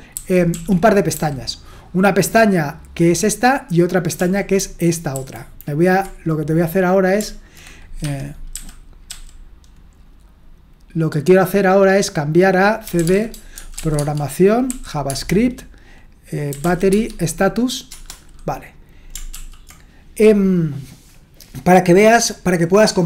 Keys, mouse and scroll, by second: 0.1 ctrl+shift+Left, 0.5 ctrl+shift+Right, 1.2 ctrl+shift+Left, 4.2 ctrl+shift+Right, 5.1 ctrl+h, 8.0 Escape, 8.5-9.1 typing, 12.6-15.2 typing, 16.3-17.1 typing, 17.9 Return, 19.3 ctrl+l.